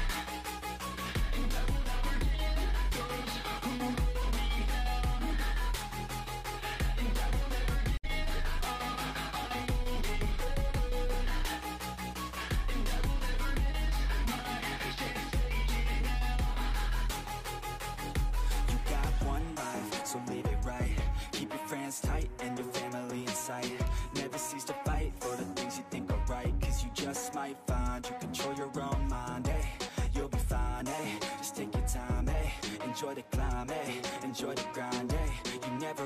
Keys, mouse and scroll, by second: 0.7 click, 0.9-1.8 scroll up 1, 1.8 click, 2.2 ctrl+z, 3.4-5.6 drag, 5.6-6.8 shift+middle drag, 6.8 click, 7.2 scroll down 3, 7.4-8.4 middle drag, 8.5 middle click, 8.6-9.2 scroll up 1, 9.2 click, 9.7 middle click, 10.4 click, 10.8 shift+middle click, 11.6 click, 12.2 shift+middle click, 13.1 click, 13.6 middle click, 14.5 click, 15.1 middle click, 15.8 click, 16.3-17.4 middle drag, 17.4 click, 17.9 middle click, 18.2-18.6 scroll down 4, 18.3 middle click, 18.6-20.4 middle drag, 20.4 KP_3, 21.0 shift+middle click, 21.1-21.6 scroll up 1, 21.6 click, 22.0 ctrl+z, 22.2 shift+middle click, 22.8-23.2 scroll up 2, 23.2 shift+middle click, 23.6-24.2 scroll up 1, 24.2 click, 25.0-25.6 scroll up 3, 25.6 scroll down 1, 25.8 ctrl+z, 26.0-29.4 drag, 29.4 shift+middle click, 29.9-32.1 drag, 32.1-32.5 scroll down 8, 32.5-35.0 middle drag, 35.0 scroll up 4, 35.2-36.0 middle drag.